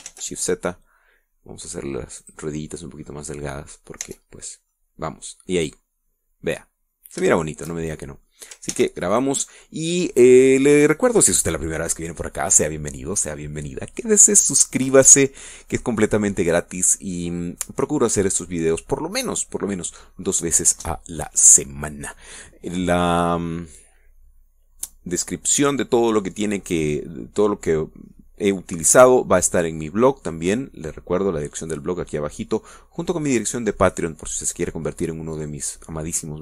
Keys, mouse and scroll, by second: 0.1 middle click, 1.2 s, 1.5 shift+z, 3.6 click, 4.5-5.6 middle drag, 5.5 Tab, 5.7 scroll down 1, 6.2-8.7 middle drag, 9.6 middle click, 10.1 ctrl+s, 10.5 ctrl+click, 10.9-13.5 ctrl+middle drag.